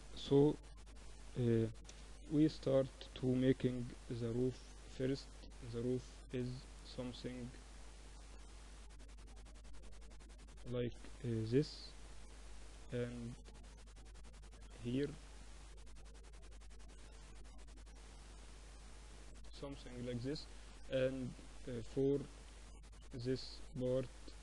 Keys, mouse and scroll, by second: 1.6 a, 2.6 b, 4.1-6.0 drag, 7.0 ctrl+r, 9.9 a, 10.8 b, 12.5-14.2 drag, 14.2-15.4 middle drag, 15.4-19.0 drag, 20.7 a, 22.0 b, 23.4-24.4 drag.